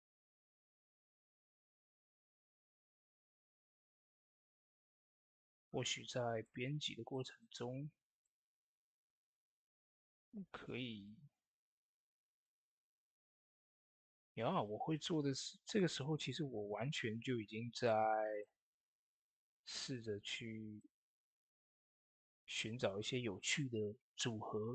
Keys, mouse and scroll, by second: 1.3 shift+d, 2.6-4.0 drag, 4.5 scroll down 1, 4.9 shift+middle click, 8.1-21.4 shift+drag, 20.9-21.6 typing.